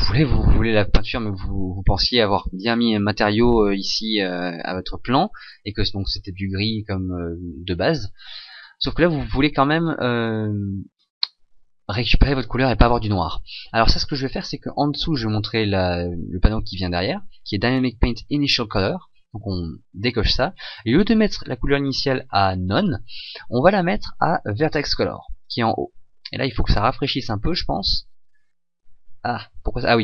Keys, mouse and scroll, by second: 24.9 click.